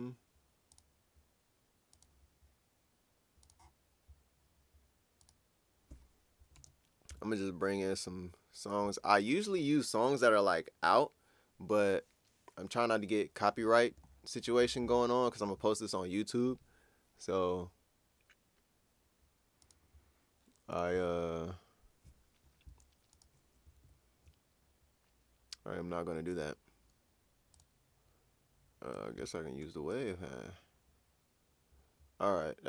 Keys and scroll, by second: 7.1 super+Tab, 23.8 super+Tab.